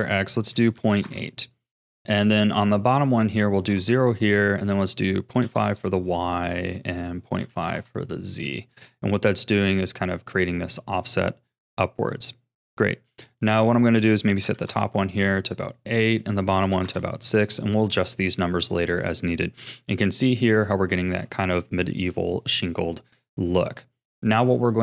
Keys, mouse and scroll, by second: 2.9-8.9 drag, 8.9-11.9 middle drag, 13.7-17.5 drag, 17.5-18.0 scroll down 5, 18.0-19.6 middle drag, 19.6 KP_1, 20.2-21.1 shift+middle drag, 21.1 ctrl+s, 24.5-24.8 drag.